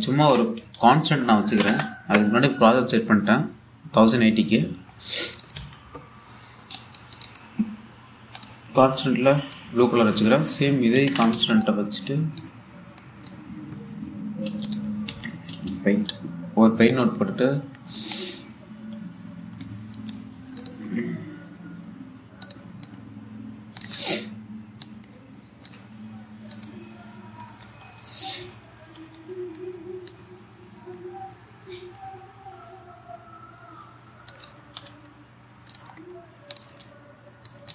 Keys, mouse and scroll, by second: 0.2 Tab, 0.6-1.9 typing, 2.1 Down, 3.3 click, 3.5 s, 3.8-4.6 scroll down 1, 5.5 scroll up 1, 5.8 click, 6.2 1, 7.4 click, 9.0 click, 10.8-11.1 scroll up 1, 11.6 ctrl+c, 11.8 ctrl+click, 12.0 v, 12.2-15.3 drag, 15.7 p, 17.5 click, 18.8 click, 20.3 click, 23.1 click, 28.4-29.0 typing, 30.8-35.2 drag, 35.2 ctrl+z, 36.4 click, 36.6-37.1 scroll down 1, 37.1 click.